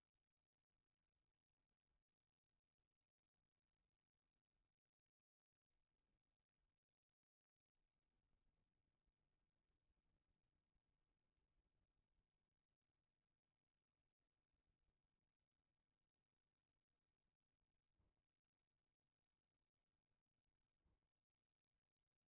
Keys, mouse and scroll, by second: 0.5 click, 1.2 click, 2.0 middle click, 3.8 click, 6.8-9.1 middle drag, 9.7 click, 10.3 click, 11.0-14.0 middle drag, 14.8 click, 15.6-16.7 middle drag, 17.2 middle click, 18.0 shift+middle click, 19.2-22.2 middle drag.